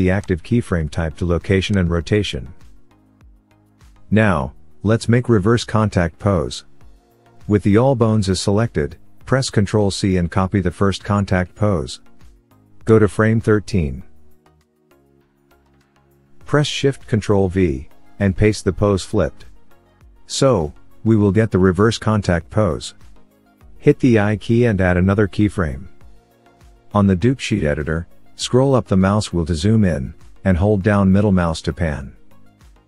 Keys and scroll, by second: 9.3 ctrl+c.